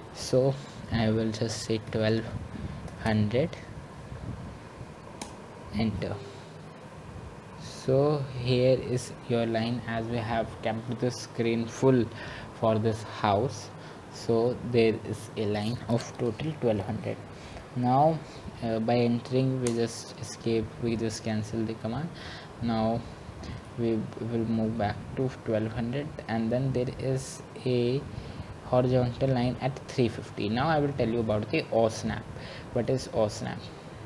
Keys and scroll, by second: 5.6 typing.